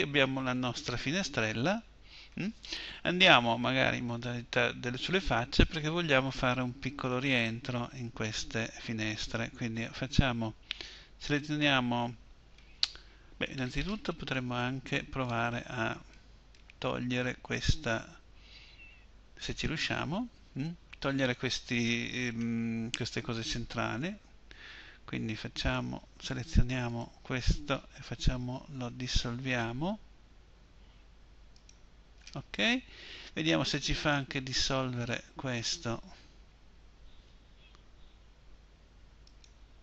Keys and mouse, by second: 13.7-22.4 middle drag, 26.8-28.7 drag, 28.7 Delete, 35.5-38.1 drag, 38.1 Delete.